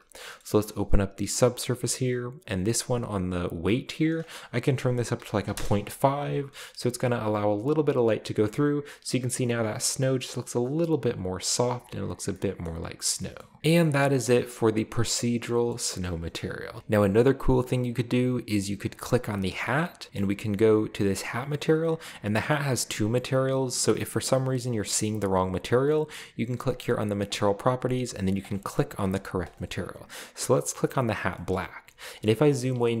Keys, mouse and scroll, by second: 0.4-1.1 middle drag, 0.5-1.2 scroll up 1, 1.4 click, 4.0 click, 4.4 click, 5.4 typing, 5.5 Return, 7.4-8.2 scroll down 2, 8.2-8.6 scroll up 1, 11.4-12.2 scroll down 1, 12.3-13.6 middle drag, 15.7 middle click, 16.8 shift+middle drag, 16.8 shift+x, 19.2-19.8 right drag, 19.6 shift+scroll up 2, 20.2-20.6 shift+middle drag, 20.3 scroll up 2, 20.9-21.2 scroll up 1, 24.1 click, 27.2 click, 27.5-28.0 drag, 28.4 click, 28.7 click, 29.0 click, 29.4 click, 30.3 drag, 31.5-32.0 middle drag, 32.2-32.8 middle drag, 32.4-33.0 scroll up 2.